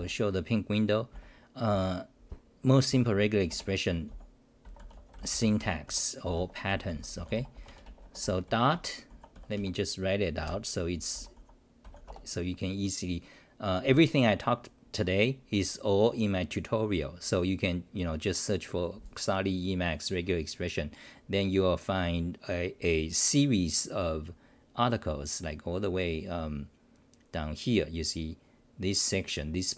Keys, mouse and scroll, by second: 3.5 Return, 4.1-6.2 typing, 5.9 Home, 7.7 Home, 7.8 Return, 8.2 u, 8.7 Home, 9.1 u, 9.6 Home, 10.4 ctrl+=, 11.1 l, 13.2-14.3 scroll down 1.